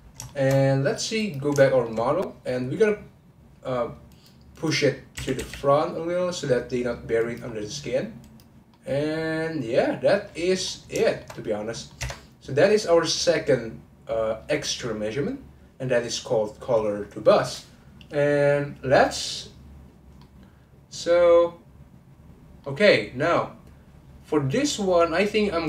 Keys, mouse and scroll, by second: 0.3 shift+middle click, 1.2 click, 1.6 shift+middle click, 2.0-4.0 scroll up 2, 4.0 click, 4.5 click, 5.1 g, 7.5-8.2 scroll down 2, 8.2 click, 8.7-10.7 middle drag, 10.7-11.0 scroll down 3, 11.0 shift+middle click, 11.7 middle click, 12.0 Tab, 20.2-23.9 middle drag.